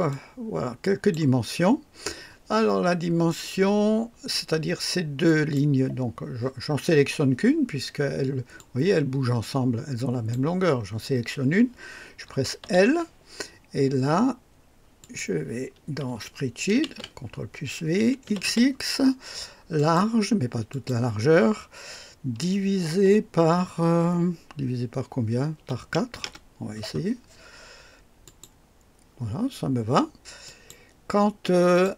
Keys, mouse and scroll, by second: 0.0-1.3 drag, 5.2 click, 8.5-10.5 drag, 12.6 l, 15.0 click, 16.8 ctrl+v, 18.2 x, 18.4 x, 19.7 click, 20.7 click, 25.5-26.1 typing, 26.2 Return, 28.2 click, 30.4 click, 31.4-31.9 typing, 31.7 click.